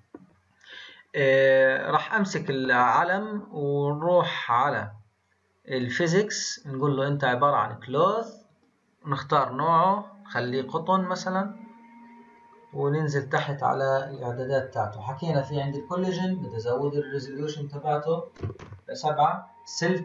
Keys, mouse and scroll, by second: 5.7 click, 6.7-11.5 drag, 11.6-15.6 scroll down 22, 15.6-16.0 drag, 16.0-16.8 scroll down 2, 16.8-19.5 drag, 19.5-20.0 scroll down 2.